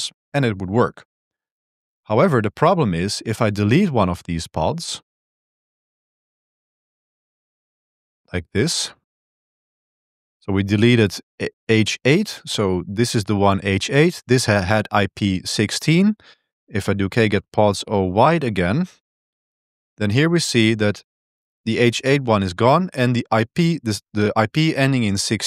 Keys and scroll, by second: 3.0-6.7 typing, 6.9 Tab, 7.2 Tab, 7.4 Tab, 7.7 Return, 8.0 Return, 8.2-10.1 typing, 16.6 Up, 17.0-19.7 typing.